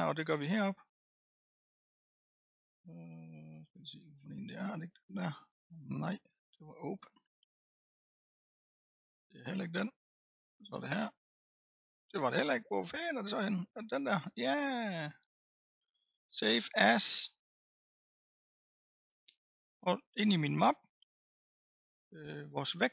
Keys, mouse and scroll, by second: 4.7-7.7 drag, 7.7-9.3 drag, 10.3-11.5 drag, 13.9-17.0 drag.